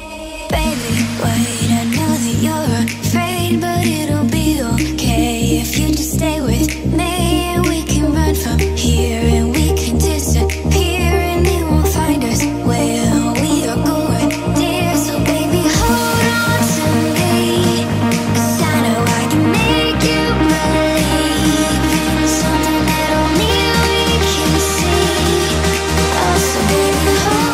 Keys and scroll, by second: 0.2 Left, 4.4 Right, 7.9 Right, 9.2 Left, 20.0 5.